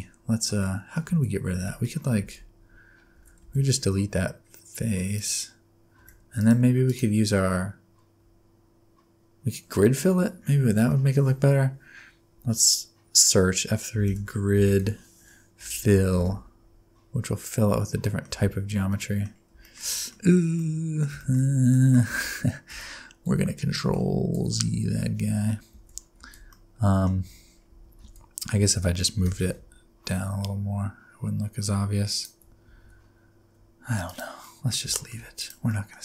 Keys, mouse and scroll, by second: 0.5 scroll down 1, 0.6 middle click, 1.1 alt+z, 1.5 alt+z, 1.8 scroll down 1, 1.8 middle click, 2.2 alt+z, 3.1 alt+z, 3.4 x, 6.0 1, 6.4 alt+click, 6.8 right click, 12.3 F3, 18.0 middle click, 18.4 Tab, 18.9 middle click, 19.3-19.6 scroll down 5, 19.6 shift+middle click, 19.8 shift+scroll up 1, 19.8-20.5 scroll down 3, 19.9 middle click, 20.5 middle click, 21.1 middle click, 21.3-22.0 shift+scroll up 5, 21.7 middle click, 22.5 ctrl+z, 22.9 ctrl+z, 23.3 ctrl+z, 23.9 ctrl+z, 24.6 ctrl+z, 25.7 alt+z, 26.2 alt+z, 26.5 middle click, 27.2 Tab, 27.5 scroll up 3, 27.8 Tab, 28.0 alt+z, 28.6 alt+z, 29.2 g, 32.7 Tab, 33.8-34.4 scroll down 3, 34.0 click, 34.4 middle click, 34.9 shift+middle click, 35.4 click, 35.7 middle click.